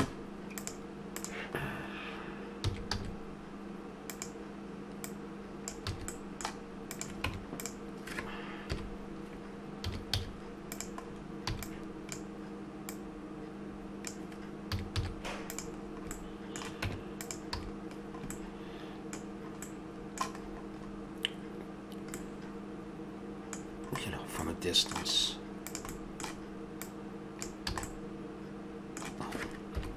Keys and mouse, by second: 0.5 click, 1.6-2.6 drag, 2.6 s, 5.0-6.1 drag, 5.9 a, 6.2-8.7 drag, 7.2 Tab, 8.7 KP_1, 9.8 a, 10.1 z, 11.5 b, 12.8-14.0 drag, 14.7 a, 15.0 z, 15.8-16.8 middle drag, 16.8 Tab, 17.6 a, 22.2 middle click, 23.3-25.6 middle drag, 25.6-28.1 drag, 27.7 a, 28.1 middle click, 28.5 click, 28.7-29.7 middle drag, 29.7 KP_7.